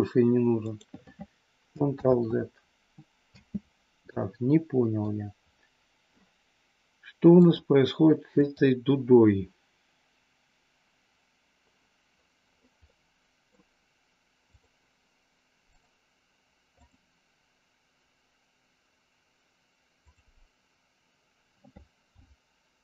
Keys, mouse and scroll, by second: 0.7 click, 1.9 ctrl+z, 3.3 space, 4.0-5.0 middle drag, 7.4-8.5 drag, 12.9 middle click, 14.4 click, 15.7 click, 16.8 click, 19.9 click.